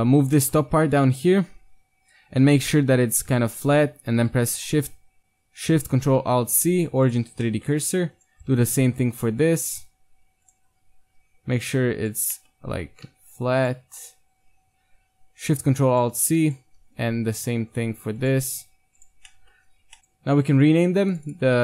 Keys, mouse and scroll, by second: 6.3 ctrl+alt+shift+c, 8.1 click, 8.1 right click, 8.3 g, 8.7-9.5 drag, 8.7-10.4 right drag, 10.6 g, 12.9-14.5 middle drag, 12.9 g, 14.5 ctrl+alt+shift+c, 16.5-18.2 right drag, 16.6 g, 18.7 ctrl+alt+shift+c, 19.4-20.0 middle drag, 20.0 BackSpace, 21.1-21.6 drag.